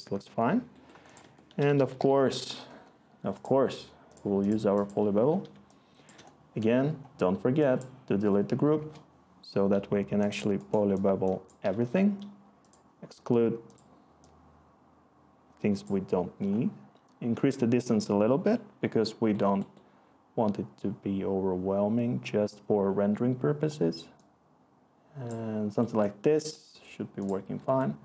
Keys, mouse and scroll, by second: 1.2 Tab, 1.3-2.4 typing, 2.6 Delete, 8.7 Return.